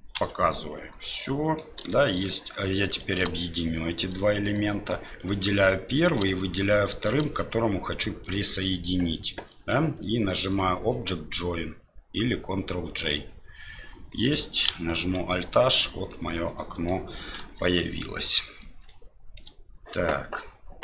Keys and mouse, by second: 0.1 KP_Divide, 1.2-1.6 middle drag, 1.9-2.3 shift+middle drag, 2.9 shift+right click, 5.2 right click, 6.7 shift+right click, 10.4-13.0 drag, 14.1 middle click, 15.0 alt+h, 16.1-16.9 middle drag, 17.4 KP_7, 18.8-19.4 shift+middle drag.